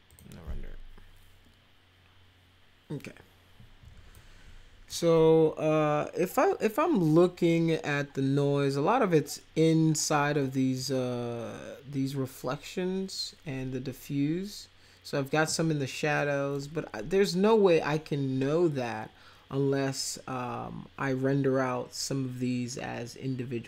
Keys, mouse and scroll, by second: 0.1 click, 4.1 click, 10.4-10.8 middle drag, 16.2 middle click.